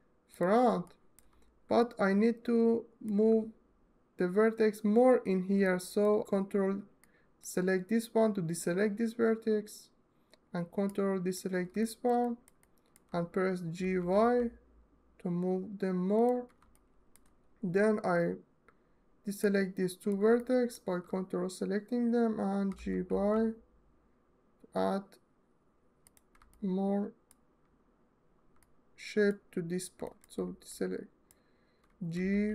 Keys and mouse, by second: 0.0 click, 0.8 alt+middle click, 6.8 ctrl+click, 10.7 ctrl+click, 11.6 alt+shift+middle click, 12.1 ctrl+alt+click, 13.5 g, 15.8 click, 16.6 alt+shift+middle click, 19.2 ctrl+click, 20.2 alt+middle click, 22.4 g, 22.7 y, 25.7 click, 26.2-26.5 alt+middle drag, 26.8-27.8 alt+middle drag, 28.3 alt+middle click, 28.7 alt+middle click, 28.7 alt+middle click, 30.4 ctrl+click, 31.8 g, 32.2 y.